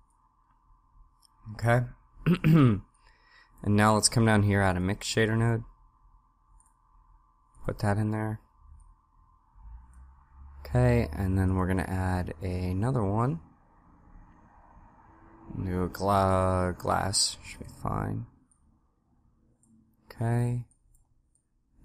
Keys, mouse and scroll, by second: 8.9 click, 18.5 click, 20.7 click, 21.4 click.